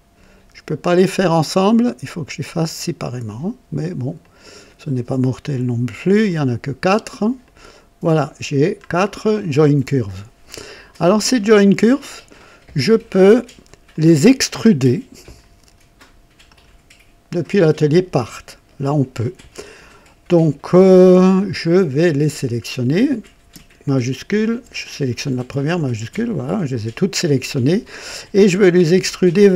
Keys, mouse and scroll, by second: 0.8 click, 3.0 click, 4.2 click, 6.0 click, 7.4 click, 8.8-9.1 scroll down 1, 10.5-11.9 drag, 12.1 right click, 12.9 click, 13.9-15.5 drag, 16.4 click, 17.5 click, 22.0 click, 25.7 shift+click.